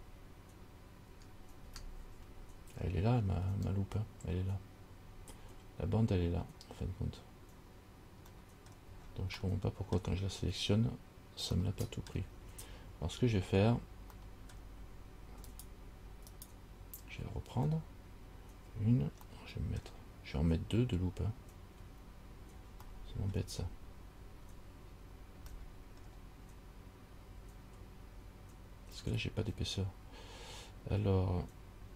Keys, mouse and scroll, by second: 1.3 ctrl+KP_Add, 3.4-4.2 scroll up 4, 8.6 middle click, 9.1-9.5 scroll down 4, 9.6 middle click, 11.8 shift+middle click, 12.9-14.3 scroll up 2, 14.3 scroll up 1, 14.4 middle click, 15.7 alt+right click, 16.6 alt+right click, 19.5 middle click, 20.6-22.1 scroll up 2, 22.6 scroll up 1, 23.1 shift+middle click, 23.8-25.0 scroll up 2, 25.1 scroll up 2, 25.8 shift+middle click, 26.7 scroll up 1.